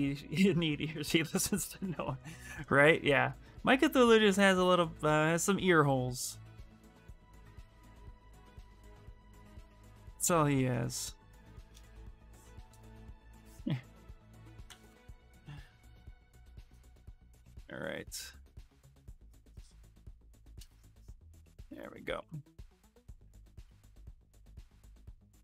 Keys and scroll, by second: 3.5 s, 5.7 s, 6.7 c, 7.7 s, 12.2-13.5 typing, 14.4 ctrl+z, 24.8 s.